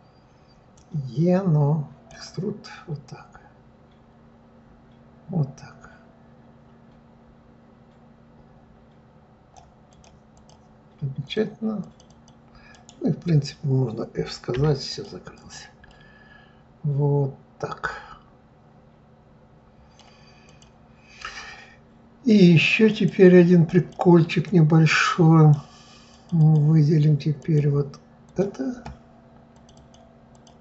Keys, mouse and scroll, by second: 0.7-3.1 drag, 9.9 click, 10.3 click, 11.2 click, 11.8 click, 12.1 click, 12.7-14.5 right drag, 14.5 f, 14.9 click, 15.3 click, 15.9-18.9 middle drag, 20.4 click, 22.9-23.9 drag, 24.4-26.2 drag, 26.4 click, 27.4-28.4 drag, 29.5 click, 29.7 click, 30.3 click.